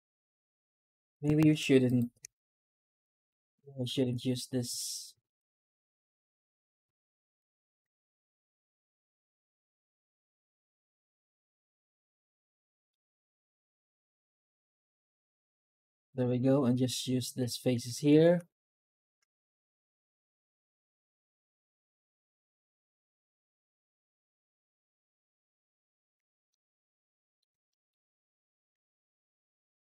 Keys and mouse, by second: 1.5 ctrl+z, 1.7 right click, 2.6 shift+h, 2.9 middle drag, 3.3 Tab, 3.9 3, 7.9 shift+right click, 11.8 middle click, 14.2 Tab, 14.9 alt+h, 15.2-15.7 middle drag, 16.1 click, 16.5 Tab, 26.4-27.2 middle drag, 27.5 shift+middle drag, 27.9 middle drag, 28.6 F9.